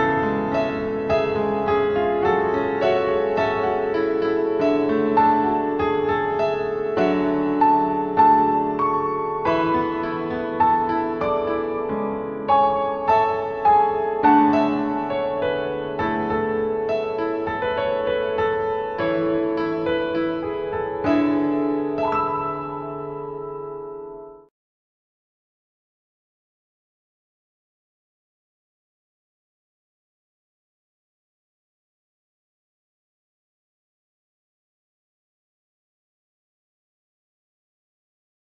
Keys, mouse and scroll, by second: 2.2 click, 3.7 click, 9.0 click, 9.7 click, 10.5 click, 11.9 click, 16.0 click, 17.3 click, 21.4 click, 23.1 click, 25.8 click, 30.7 click, 33.9 click.